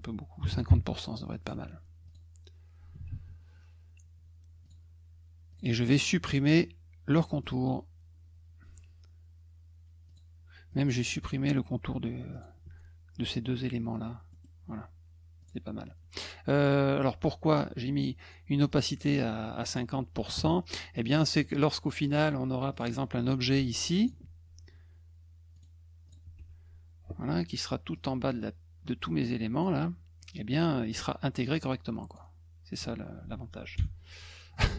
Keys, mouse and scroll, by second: 1.5 F1, 2.0 click, 3.1 ctrl+z, 4.6 click, 5.5 click, 7.4 middle click, 10.1 click, 10.7 click, 12.3 shift+click, 14.3 middle click, 15.4 click, 18.7 click, 19.7 click, 20.9 middle click, 22.7 click, 23.2 click, 25.5 right click, 26.1 click, 26.4 F1, 27.9-29.6 drag, 30.2-32.1 drag.